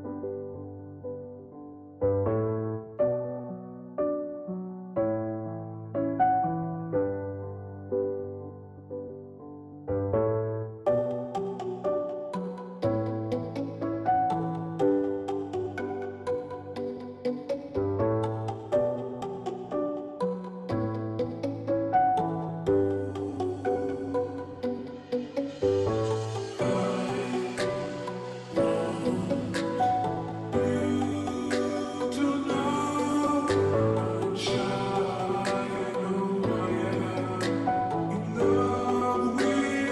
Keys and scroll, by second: 17.7-18.5 Down, 19.8 Down, 19.8 Up, 20.2 Down, 20.3 Down, 25.0 Up, 25.0 ctrl+t, 38.6 Return.